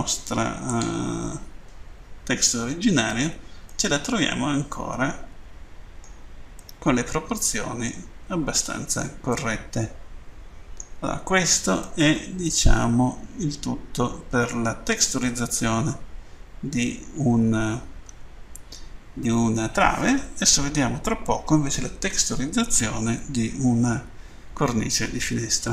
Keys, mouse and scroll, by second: 0.7 click, 1.8 scroll up 2, 3.7 middle click, 6.5 middle click, 8.3 scroll down 2, 9.4 middle click, 11.2 scroll down 2, 11.9 middle click, 15.7-16.0 scroll up 1, 18.1 Tab.